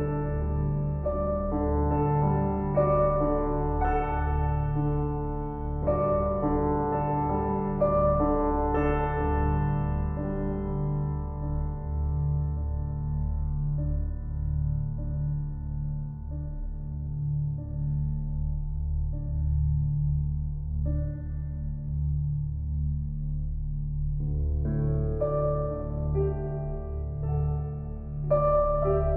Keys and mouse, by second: 0.0 click, 0.6 alt+click, 1.7 click, 2.5 click, 3.0 click, 6.6 click, 7.1 alt+click, 8.4 click, 10.2 alt+click, 11.1 click, 11.6 alt+click, 13.3 click, 13.9 alt+click, 15.6 click, 18.7 click, 21.1 click, 22.1 click, 22.5 alt+click, 24.1 click, 25.6 ctrl+alt+drag, 26.5 F12.